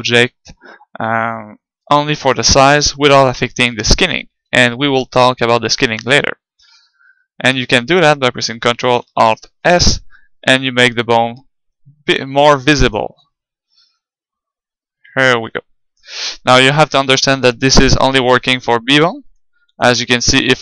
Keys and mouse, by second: 2.0-3.8 middle drag, 3.9-5.6 middle drag, 9.5 ctrl+alt+s, 13.0-15.6 drag, 17.9-20.6 drag.